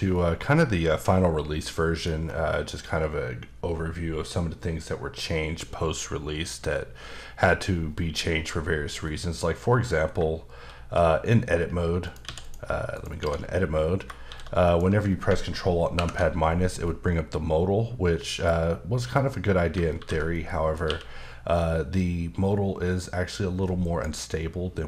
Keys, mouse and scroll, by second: 2.2-2.5 scroll down 1, 2.5 middle click, 5.9-8.0 scroll up 1, 9.1 middle click, 9.6 scroll up 1, 10.0 scroll down 2, 10.6 shift+d, 12.0 click, 12.2 x, 12.4 click, 12.9 click, 13.1 Tab, 13.7 middle click, 14.2 shift+d, 14.6 click, 15.9 ctrl+alt+KP_Subtract, 16.8 middle click, 18.6-19.7 scroll up 1, 20.0 ctrl+z, 20.3 middle click, 20.8 q, 23.8 click, 24.5-24.8 scroll down 1.